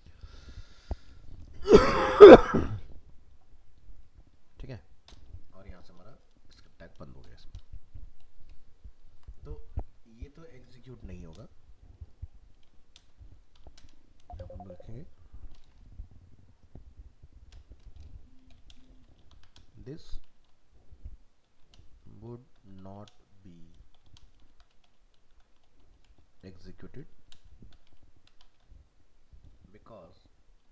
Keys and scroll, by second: 9.1 ctrl+s.